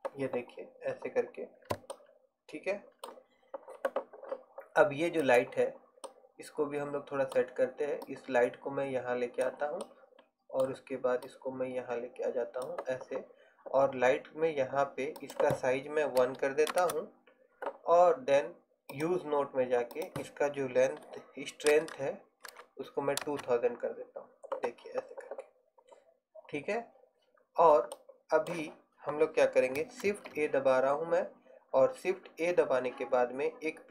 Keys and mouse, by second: 5.3-9.6 right drag, 11.4-15.3 middle drag, 22.0 KP_0, 30.2 shift+a.